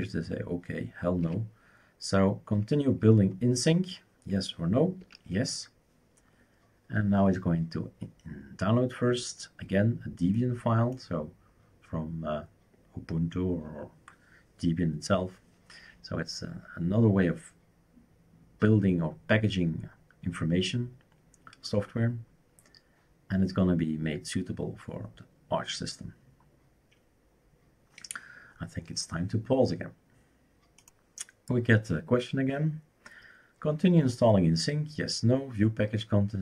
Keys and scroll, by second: 1.2 typing, 5.0 typing.